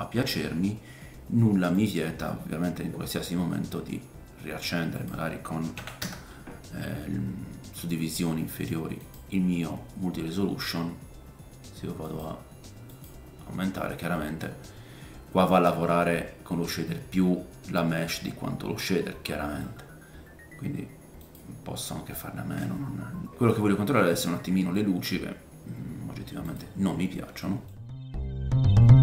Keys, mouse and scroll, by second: 1.8-5.0 drag, 9.1-27.6 drag, 12.0-21.3 middle drag, 12.0-21.3 right drag, 22.6 middle click, 24.2-24.7 scroll down 2, 24.7 middle click, 26.5 middle click, 26.5 right click, 27.0-27.4 scroll down 1, 27.4 middle click, 27.6-29.0 right drag, 27.8 scroll up 1, 28.0 shift+middle click, 28.1 click, 28.7 click.